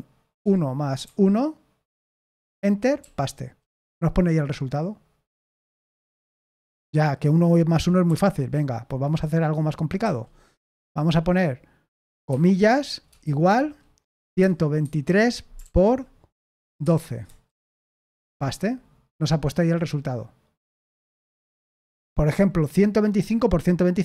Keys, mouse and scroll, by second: 2.9 p, 8.0 typing, 10.0 a, 13.9-15.3 typing, 16.4-18.2 typing, 20.7-21.6 typing.